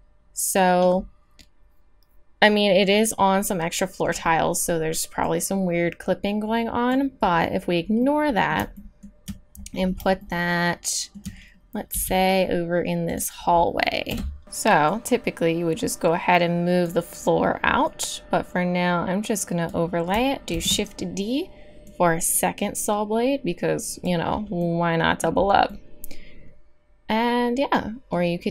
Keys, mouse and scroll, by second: 1.4 middle click, 1.6 middle click, 8.1 middle drag, 8.3 middle click, 8.4-9.5 middle drag, 11.9 g, 14.1 KP_7, 14.4 z, 17.8-20.5 drag, 20.5 shift+d, 24.7 middle drag, 24.8 middle click, 25.4 middle click, 25.8 middle click, 25.9 middle drag, 26.1 middle click, 26.3 middle click, 27.0 middle click, 27.3 middle click.